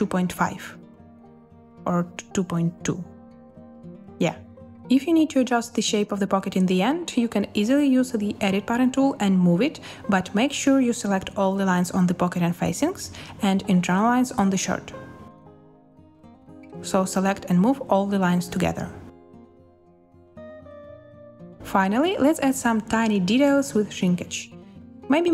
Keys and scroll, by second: 0.1-1.3 typing, 2.4-3.4 typing, 8.4 z, 14.4-15.2 typing, 16.3 space, 21.5 space.